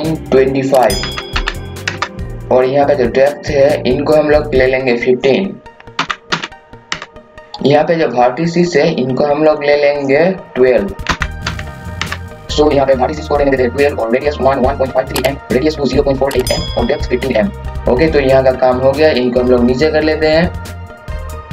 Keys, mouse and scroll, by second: 1.0 KP_2, 1.3 KP_5, 2.3 KP_2, 4.4 click, 6.0 KP_1, 6.3 KP_5, 7.4 KP_0, 9.4 click, 11.0 KP_1, 11.4 KP_2, 12.3 click, 20.2 scroll down 1, 21.4 scroll up 1.